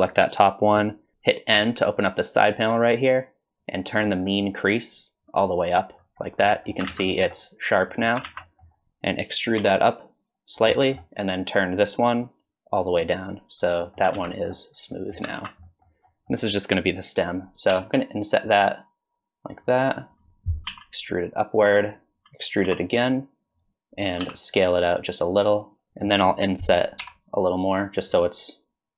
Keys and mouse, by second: 1.6 n, 5.3 click, 6.5 click, 6.9 alt+z, 7.1 click, 7.9 click, 8.4 alt+z, 8.4 click, 9.6 e, 10.7 middle click, 12.6-13.8 drag, 13.8 middle click, 14.2 alt+z, 14.3 middle click, 15.0 middle click, 15.5 alt+z, 15.7 middle click, 16.1 middle click, 17.7 i, 20.7 e, 22.7 e, 24.2 s, 25.8 middle click, 27.0 i.